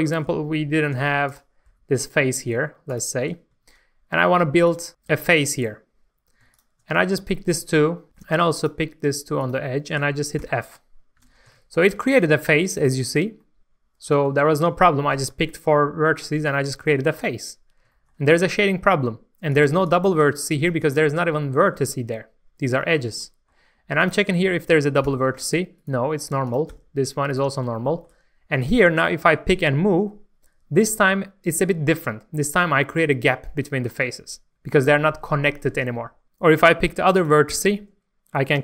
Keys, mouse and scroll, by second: 0.9 3, 1.3 click, 2.9 click, 3.5 click, 4.7 click, 6.5 shift+click, 8.1 shift+middle click, 8.6 shift+click, 9.4 shift+click, 10.3 shift+f, 11.0 scroll down 1, 11.2 alt+a, 11.4 Tab, 11.7 scroll down 1, 12.1 shift+middle click, 15.3 Tab, 16.2 middle click, 17.5-17.9 scroll up 1, 19.5-20.8 drag, 21.3 scroll up 1, 21.4-22.6 middle drag, 24.0 click, 24.4 shift+middle click, 25.1 g, 25.8 right click, 26.4 click, 26.7 g, 27.3 right click, 27.8 shift+middle click, 28.6 click, 29.0 shift+middle click, 29.5 g, 34.8 right click, 37.1 click, 37.5 g.